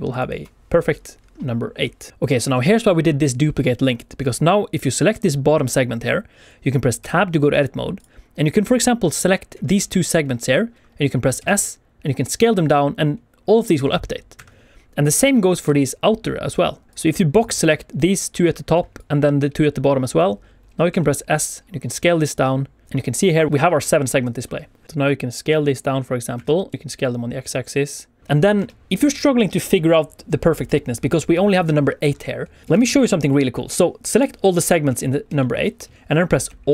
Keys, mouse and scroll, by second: 0.0 ctrl+click, 2.1 Tab, 2.3 click, 2.5 click, 4.7 click, 4.9 click, 6.9 Tab, 7.9 click, 8.4 click, 11.3 s, 14.3 Escape, 14.9 click, 15.8 shift+click, 16.9 click, 17.3 click, 18.9 click, 20.8 s, 22.8 click, 24.8 shift+middle click, 24.8-25.9 scroll down 1, 24.8 s, 26.3 Escape, 26.6 s, 26.7 click, 26.7 x, 28.2 click, 28.2 shift+middle click, 28.2-28.5 scroll down 2, 28.5 Tab, 31.3 click, 32.4 scroll down 1, 32.6 shift+middle click, 32.7 alt+a, 33.6 click, 35.3 shift+middle click, 36.6 alt+d.